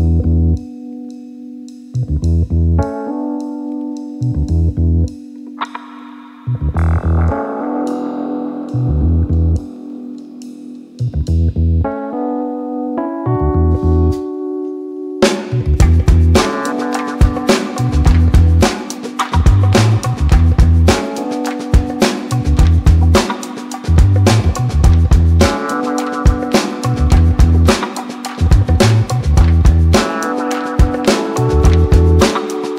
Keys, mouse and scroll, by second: 5.2 click, 6.6-18.4 drag, 18.4 n, 18.9 click, 20.1 space, 22.4 space, 22.8 click, 24.1 ctrl+a, 25.0-30.1 drag.